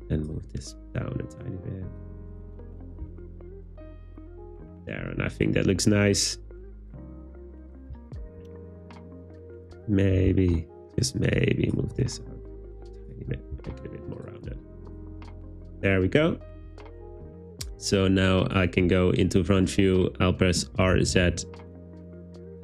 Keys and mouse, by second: 0.5 g, 2.0 click, 2.5 click, 2.7 Tab, 3.0 z, 9.7 Tab, 10.3 z, 11.9 g, 13.0 click, 13.3 Tab, 13.6 z, 20.8 r, 21.0 z, 21.2 9, 21.3 0.